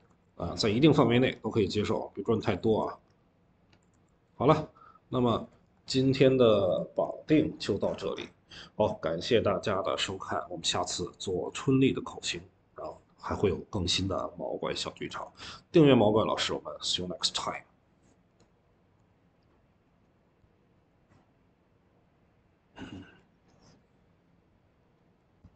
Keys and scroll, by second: 2.5 ctrl+z, 3.8 ctrl+z, 5.5 Escape, 6.6 ctrl+s.